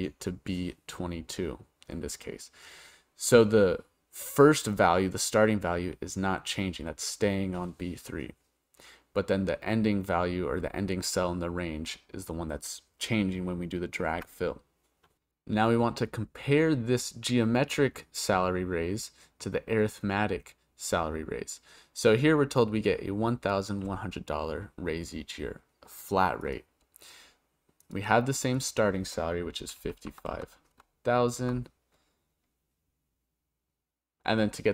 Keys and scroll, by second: 14.1 Return.